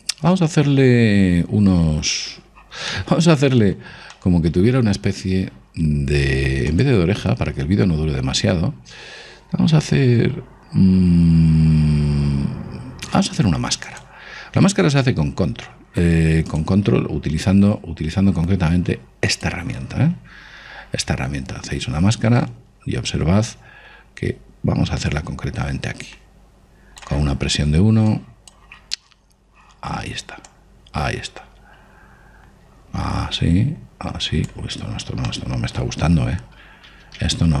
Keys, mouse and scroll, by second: 3.6-6.6 middle drag, 7.4 click, 17.2 click, 25.7 click, 28.8 click, 31.2 click, 36.0-37.6 middle drag, 37.3 ctrl+z.